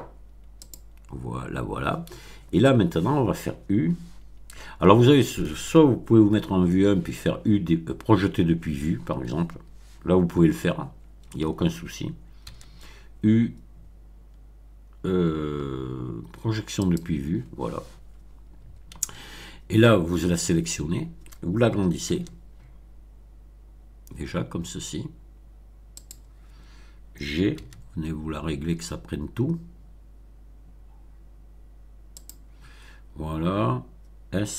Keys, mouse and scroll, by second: 0.6 click, 1.3 scroll down 2, 6.3 1, 12.4 u, 16.8 click, 18.9 a, 22.0 s, 25.9 click, 27.5 g, 32.1 click.